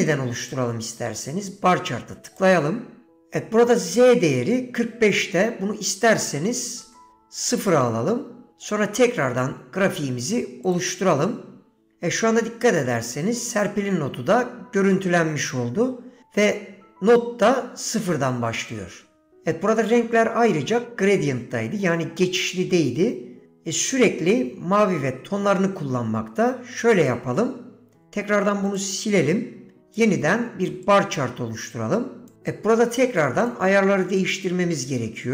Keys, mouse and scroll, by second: 0.6-10.9 drag, 27.0-28.9 right drag, 30.0-35.3 drag.